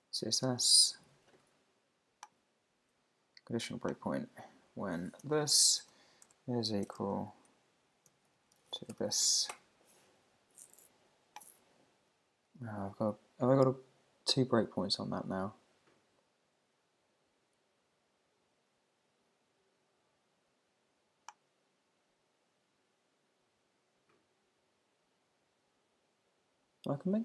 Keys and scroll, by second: 5.2 super+v, 9.5 Return.